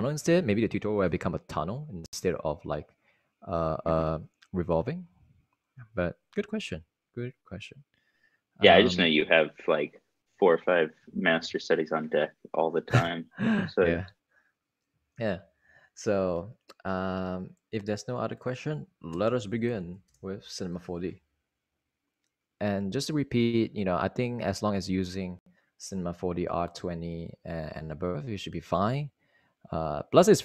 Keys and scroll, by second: 15.6 super+Right, 19.8-21.4 typing.